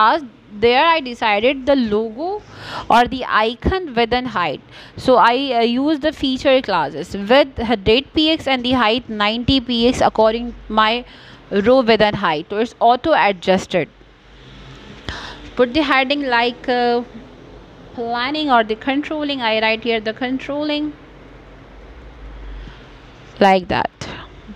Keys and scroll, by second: 5.5 Caps_Lock, 9.9 o, 11.8 n.